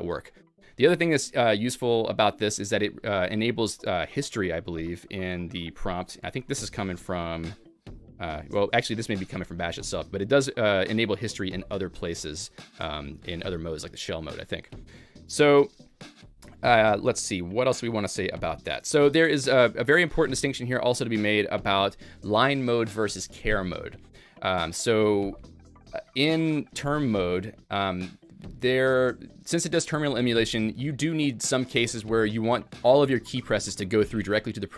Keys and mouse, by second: 0.6 shift+a, 4.2 Up, 4.8 Up, 5.0 Up, 5.4 Up, 5.8 Up, 5.8 Up, 6.2 Escape, 6.6-9.1 typing, 7.7 Escape, 7.9 Up, 8.3 Down, 8.7 Escape, 9.5 Up, 9.7 Up, 9.9 Up, 10.1 Up, 11.1 Up, 11.5-12.4 BackSpace, 12.6-15.8 BackSpace, 13.1 Escape, 19.0 Escape, 19.0 Up, 19.0 Down, 19.0 a, 19.0-20.0 BackSpace, 20.6 a.